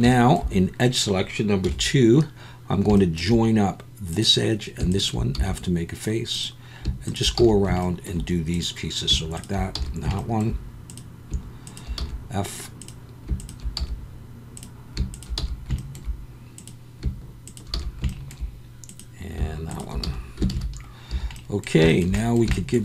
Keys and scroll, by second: 0.0 2, 1.6 KP_1, 5.3 f, 7.4 f, 9.7 f, 12.0 f, 13.8 f, 15.4 f, 17.7 f, 20.0 f, 20.5 alt+a, 21.1 a.